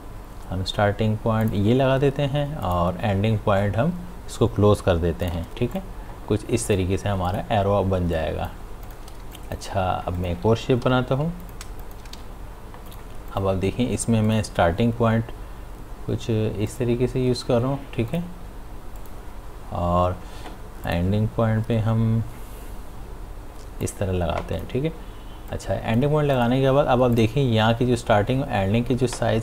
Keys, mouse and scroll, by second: 1.4 click, 3.3-5.2 scroll down 1, 5.2 click, 8.0 space, 8.2 click, 8.5 space, 8.8 ctrl+click, 9.2 space, 9.3 click, 10.8 p, 11.4 click, 12.1 v, 12.9 click, 16.7 click, 22.3-23.2 scroll down 1, 23.8 click.